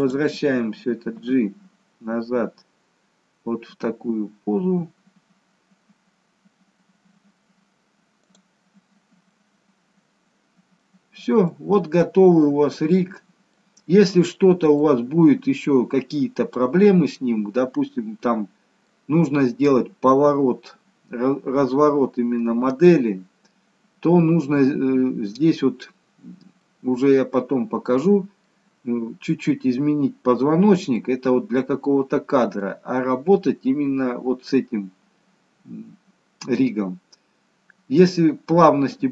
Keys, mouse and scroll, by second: 0.0 click, 1.1 g, 9.3-11.2 scroll up 2, 11.2 middle click, 11.2-11.6 scroll up 1, 11.6 middle click, 13.3-13.7 scroll down 1, 13.7 middle click, 14.9 middle click, 16.2-17.5 scroll up 3, 16.7 middle click, 19.4 scroll down 2, 23.0-25.3 scroll down 1, 26.7 middle click, 31.1 middle click, 32.9-33.4 scroll up 2, 33.4-34.0 scroll down 1, 36.4 middle click, 38.2-39.1 scroll down 1.